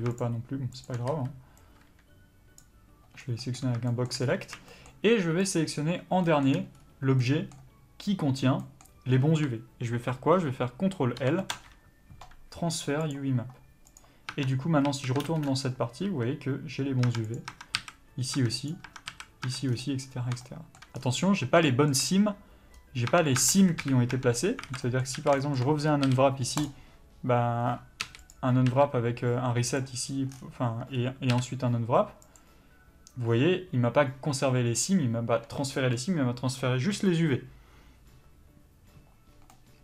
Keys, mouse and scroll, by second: 0.1 shift+click, 2.5 b, 3.2 scroll down 1, 3.4-5.5 middle drag, 4.2 scroll up 1, 5.5 shift+click, 6.2-13.9 shift+middle drag, 6.7 scroll up 1, 13.9 click, 14.3 Tab, 14.8 a, 15.2 ctrl+space, 16.0 a, 17.0 Tab, 17.3 click, 17.4 Tab, 17.7 a, 18.3 Tab, 18.6 click, 18.8 Tab, 19.0 a, 19.4 Tab, 19.6 scroll down 1, 20.4 shift+middle click, 20.9 scroll down 1, 21.6 shift+middle click, 22.7-23.1 scroll up 1, 23.1 Tab, 23.8 KP_Decimal, 24.1 Tab, 24.8 middle click, 24.8 a, 25.1 a, 25.4 shift+middle click, 26.6 u, 30.9-32.3 scroll up 1, 32.3 u.